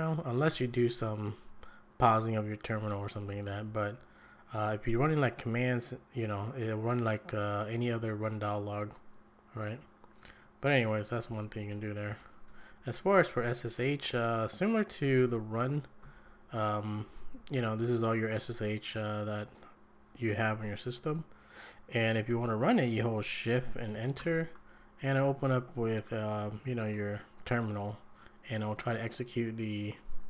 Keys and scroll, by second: 3.3 Down, 3.7 Up, 11.2 shift+Right, 12.5 BackSpace, 13.0 BackSpace, 13.0 BackSpace, 15.2 shift+Left, 16.0 shift+Right, 17.1 Down, 17.3 Up, 24.2 shift+Return.